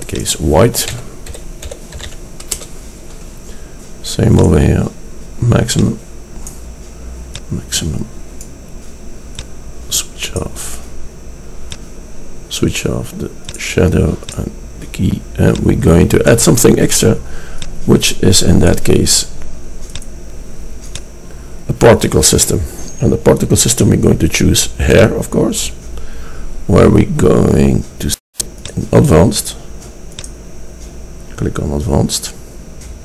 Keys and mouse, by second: 2.0-4.5 middle drag, 6.3-7.4 middle drag, 9.5-11.4 drag, 11.4 middle click, 17.5 middle click, 17.6 click, 19.6 middle click, 20.0-22.6 drag, 23.0-23.8 middle drag, 26.9-31.5 middle drag.